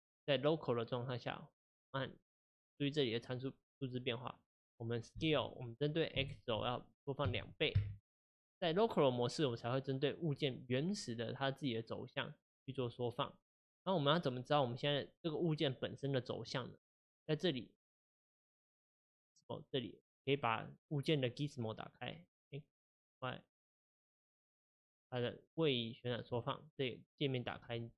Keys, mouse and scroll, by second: 2.0 click, 5.2 s, 9.6-22.2 middle drag, 22.2-23.7 drag, 26.4-27.9 middle drag.